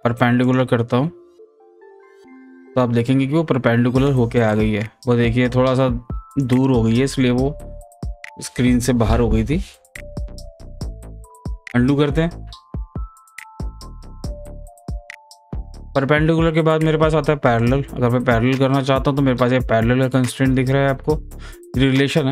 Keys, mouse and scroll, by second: 1.5 scroll down 1, 1.8 scroll up 1, 2.9-4.5 scroll down 1, 4.5-6.3 drag, 6.3 click, 7.3-9.2 scroll down 1, 10.9 click, 11.6 ctrl+z, 13.6 ctrl+z, 17.6 click.